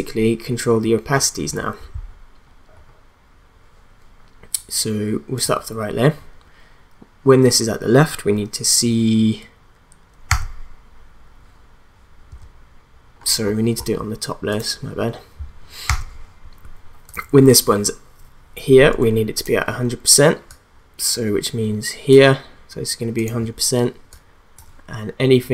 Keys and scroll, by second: 15.8 t.